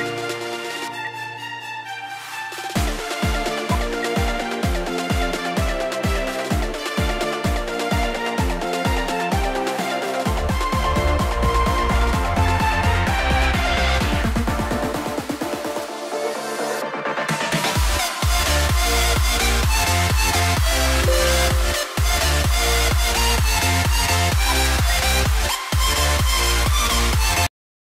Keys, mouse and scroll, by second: 0.9 F2, 2.9 double click, 3.8 ctrl+z, 6.4 double click, 20.8 double click, 24.1 double click, 25.6 scroll down 1.